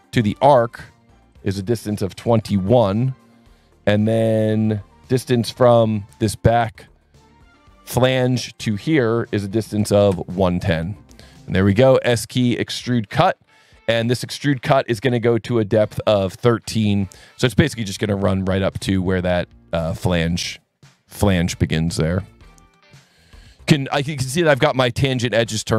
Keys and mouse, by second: 0.6 click, 1.6 click, 2.0 KP_2, 2.3 KP_1, 2.5 KP_Enter, 6.8 click, 8.0 click, 8.5 click, 9.6 KP_1, 9.9 KP_0, 10.1 KP_Enter, 11.3 s, 12.3 click, 16.6 KP_1, 16.8 KP_3, 17.6 KP_Enter, 19.8 click, 22.1 click.